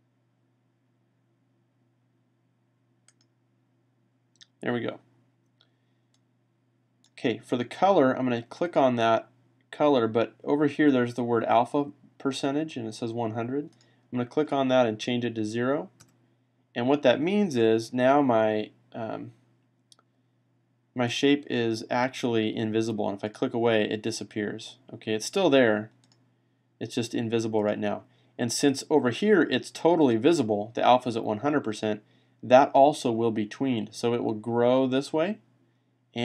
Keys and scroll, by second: 14.9 o.